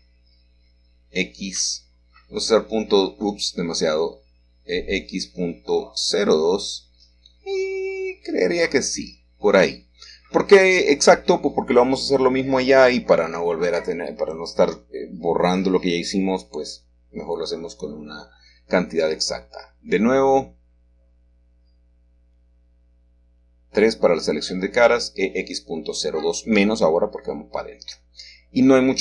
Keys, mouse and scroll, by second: 2.0 e, 3.6 x, 5.0 x, 5.9 Escape, 7.1 typing, 8.4-8.8 typing, 10.4 Return, 11.8-13.5 scroll down 1, 13.5 scroll down 1, 13.5-14.8 middle drag, 18.5 ctrl+r, 19.3 ctrl+click, 20.4-20.9 scroll up 2, 21.7 click, 24.6 click, 25.0 middle click, 26.4-29.0 typing.